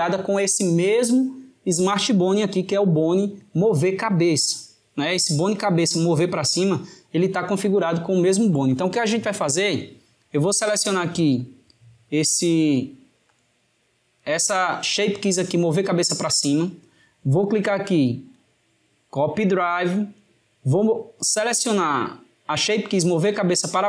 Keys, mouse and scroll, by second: 12.0-13.2 drag, 18.0-21.2 right drag, 21.7 click.